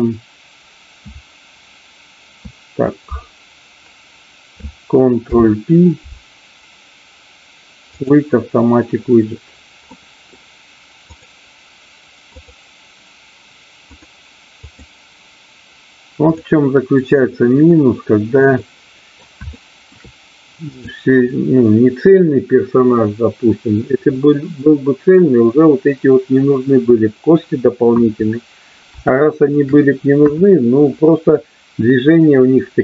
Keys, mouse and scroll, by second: 5.1 ctrl+p, 9.9 middle click, 11.1 click, 12.3 click, 14.1 click, 18.5 middle click, 19.4 shift+middle click, 20.6-21.8 drag, 24.0-25.0 middle drag, 29.1 shift+middle click, 30.3 KP_1.